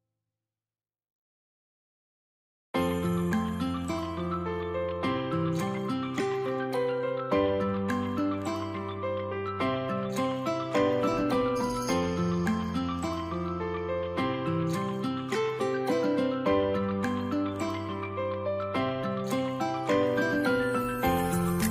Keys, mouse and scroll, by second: 0.0-0.3 scroll up 1, 3.0 scroll up 1, 3.0 space, 7.3 middle click, 7.8 scroll up 1, 12.9 shift+click, 12.9 space.